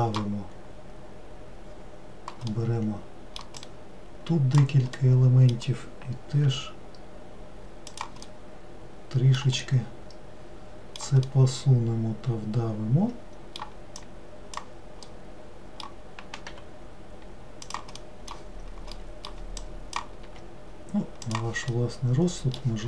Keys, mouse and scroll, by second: 3.7 click, 5.1-6.5 middle drag, 6.5 g, 8.4-14.1 middle drag, 14.1 click, 15.1-16.6 middle drag, 16.6 g, 18.1-19.7 middle drag, 19.7 click, 20.4 g, 21.8-22.8 middle drag.